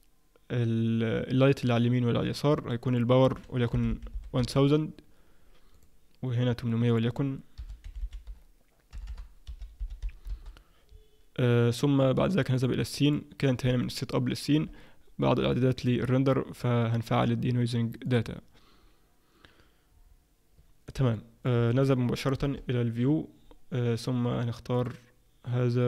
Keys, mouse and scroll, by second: 2.9 click, 3.9 0, 5.7 click, 6.9 click, 8.0 -, 9.0 BackSpace, 9.8 0, 12.6 click, 13.0 click, 13.8 middle click, 15.8 click, 18.0 click, 21.2 middle click, 22.4 KP_0, 24.7 click.